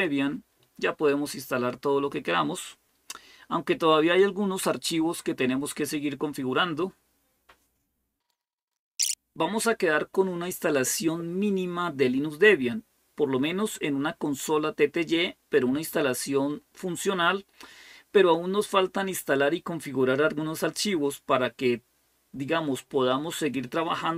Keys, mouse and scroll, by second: 0.0-0.2 typing.